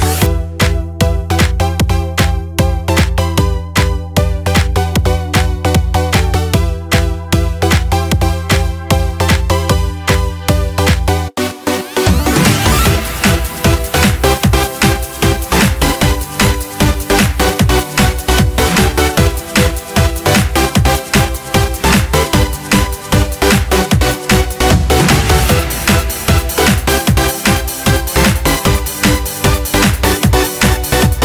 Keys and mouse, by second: 1.5-3.7 drag, 4.1-7.1 middle drag, 8.0 click, 10.3-12.0 drag, 12.3-14.3 middle drag, 15.5 click, 16.6-21.1 drag, 21.9-25.3 middle drag, 26.1 middle click.